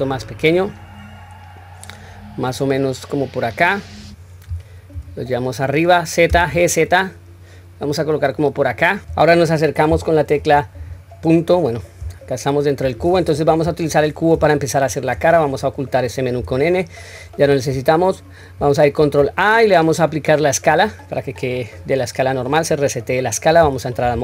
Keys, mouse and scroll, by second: 10.9-11.3 scroll up 1, 12.1-12.6 middle drag, 12.1-12.6 scroll up 1, 13.5 KP_1, 14.6 shift+middle click, 16.4 n, 19.0 ctrl+a.